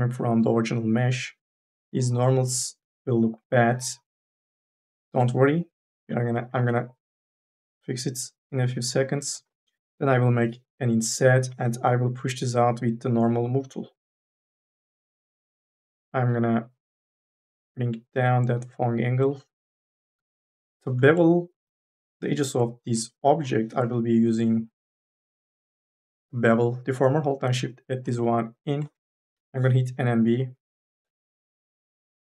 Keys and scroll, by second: 6.7 ctrl+z, 9.8 m, 10.3 w, 20.5 4, 20.8 3, 21.7 2, 22.0 3, 23.3 4, 29.1 n, 29.5 b.